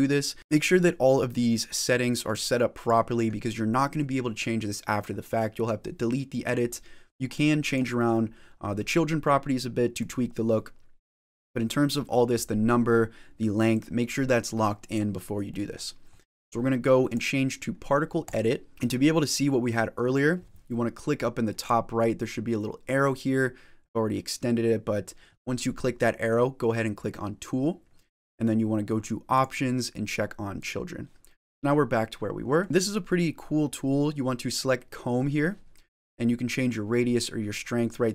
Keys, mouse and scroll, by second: 0.4 middle click, 0.4-2.1 scroll down 1, 2.1 click, 7.2 click, 9.9 click, 13.6 click, 15.4 middle click, 16.0 middle click, 17.2 click, 18.7 shift+middle click, 18.7 scroll down 1, 21.5 click, 30.0 click, 30.5 click, 31.1 middle click.